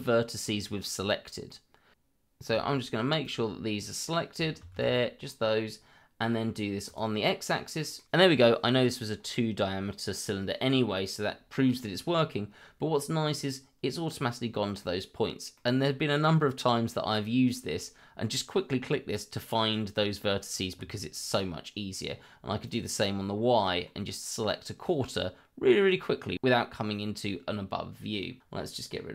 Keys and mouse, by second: 1.3 middle click, 1.9 shift+z, 2.7 middle click, 2.9 z, 3.2-3.8 drag, 4.6 shift+z, 4.9-5.2 middle drag, 6.8 click, 8.0 middle click, 9.5-9.9 middle drag, 11.7-13.1 middle drag, 14.8 middle click, 15.5 middle click, 22.7 click, 23.6 middle click, 27.3 middle click.